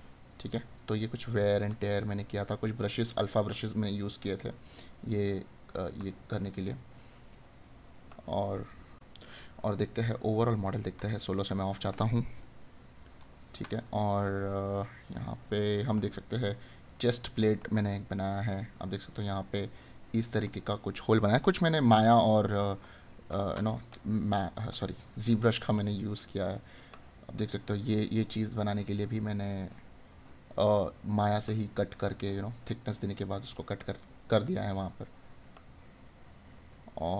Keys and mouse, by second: 13.2 right click, 17.7 right click, 19.5 right click, 23.1 right click, 31.3 right click.